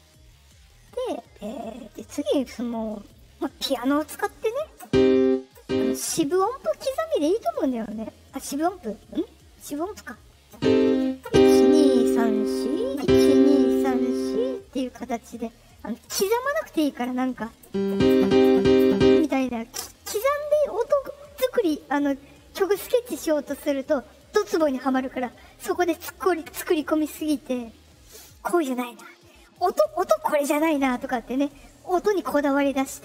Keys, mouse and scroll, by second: 0.3 middle click, 0.3 scroll up 2, 0.7 middle click, 1.4 middle click, 3.0 click.